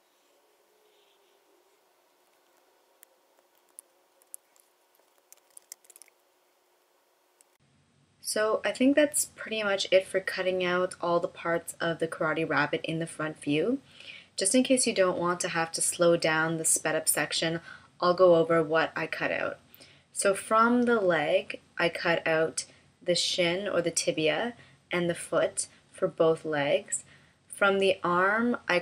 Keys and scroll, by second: 4.2 super+F9.